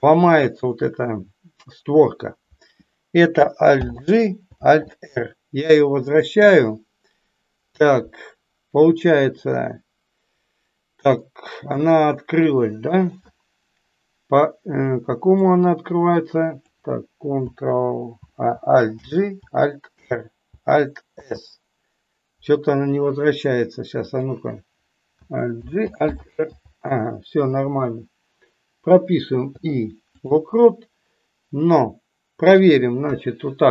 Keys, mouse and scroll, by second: 11.2-12.3 middle drag, 15.3-16.5 drag, 23.9 click, 32.4 click.